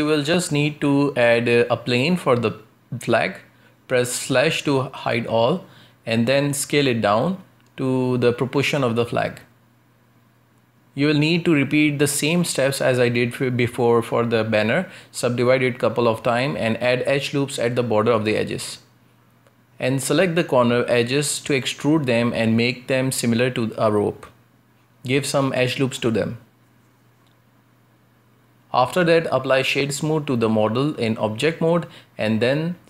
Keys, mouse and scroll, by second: 0.4 shift+a, 4.7 /, 5.5-6.8 middle drag, 6.8 Tab, 7.2 s, 9.2-10.5 middle drag, 10.5 w, 11.5 w, 13.5 middle click, 14.3-14.7 scroll up 1, 14.7 ctrl+r, 16.8 ctrl+r, 18.9 shift+middle click, 19.5 a, 19.7 a, 21.0 b, 22.0 b, 23.2 e, 25.2 ctrl+r, 26.7 ctrl+r, 28.5-31.0 shift+middle drag, 31.0-31.3 scroll down 1, 31.3-32.8 middle drag.